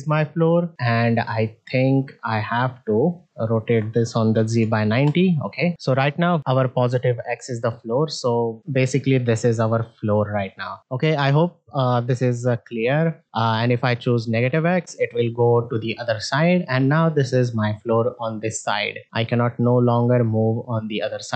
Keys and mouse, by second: 0.7 ctrl+Tab, 1.0 click, 2.9 middle click, 3.5 r, 5.8 ctrl+Tab, 6.1 click, 6.4 middle click, 7.2-8.6 middle drag, 9.2-10.8 drag, 12.6-13.2 middle drag, 14.3 click, 14.9 middle drag, 16.3-19.7 drag, 20.1 middle drag.